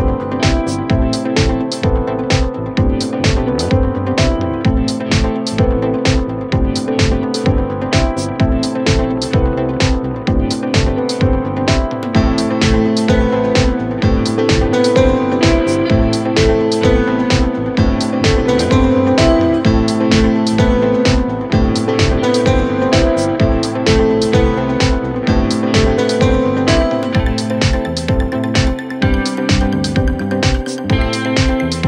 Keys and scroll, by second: 0.1 ], 0.7 ], 19.7 ], 20.9 ], 22.9 ], 27.4 Escape, 28.3 `, 29.2 ], 30.9 4, 31.5 3.